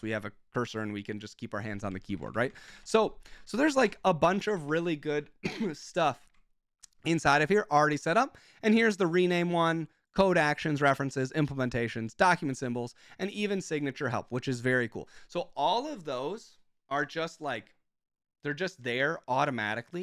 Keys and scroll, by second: 0.0 shift+k, 1.9 Escape, 2.0-3.4 typing, 3.8 Up, 3.8 Return, 4.5 ctrl+f, 4.7 ctrl+f, 6.3 ctrl+f.